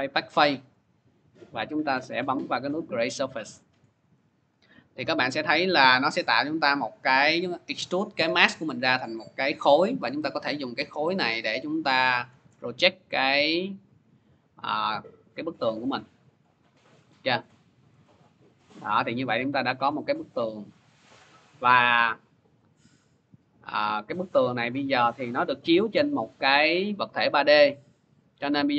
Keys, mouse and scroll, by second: 2.1 click, 4.3 click, 5.2 click, 6.1 click, 7.7-8.3 scroll, 9.3 v, 15.7 click, 16.9 middle click, 17.8 middle click, 18.7-19.2 scroll, 22.3 click, 22.9-23.6 scroll, 24.0 scroll, 26.3 c, 27.4 middle click.